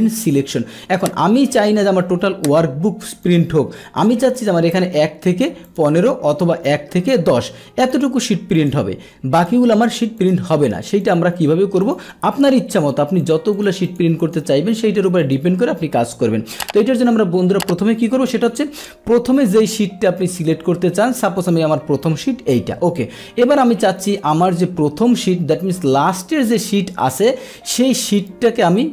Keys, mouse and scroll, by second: 0.6 Escape, 1.3 Escape, 3.2 click, 4.3 click, 5.7 ctrl+click, 6.3 click, 7.8 ctrl+click, 8.5 click, 9.3 click, 9.8 click, 10.1 click, 11.0 click, 11.8 click, 12.8 click, 13.2 click, 13.5 click, 13.9 click, 14.2 click, 15.2 click, 16.5 click, 18.4 click, 21.4 click.